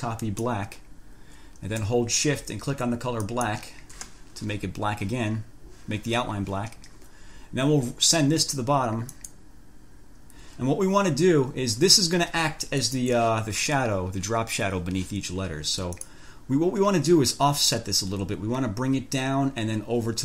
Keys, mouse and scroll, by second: 0.5 click, 3.5 shift+click, 9.4 click, 13.0 click, 16.1 click.